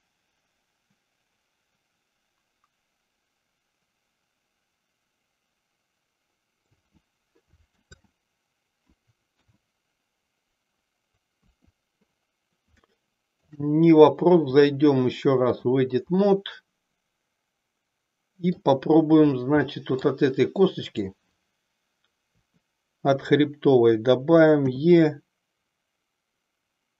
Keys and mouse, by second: 8.0 ctrl+z, 9.3 KP_1, 11.5 KP_3, 12.8-13.5 shift+middle drag, 14.5-15.8 drag, 16.1-18.8 middle drag, 19.7 middle click, 20.9 click, 22.5 KP_3, 24.6 e.